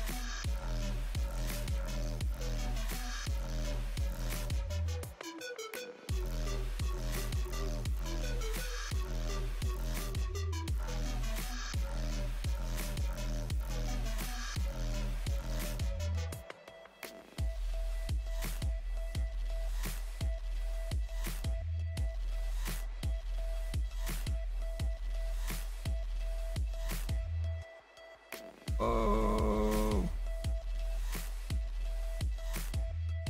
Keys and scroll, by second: 8.6-11.4 typing, 12.6 s, 13.4 s.